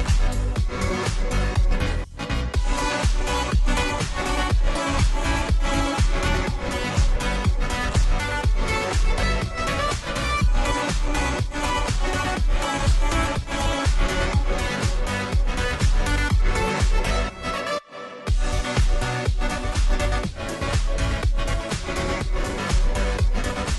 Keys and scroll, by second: 0.0-23.7 typing, 21.1-22.7 Left, 23.3 ctrl+z.